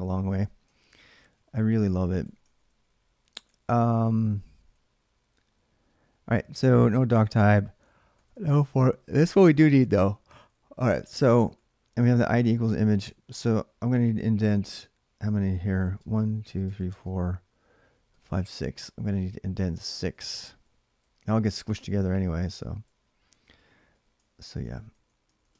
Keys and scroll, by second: 0.3-5.2 typing, 6.4 d, 6.6 d, 8.9-12.9 typing, 15.0-20.2 typing, 22.8-25.5 typing.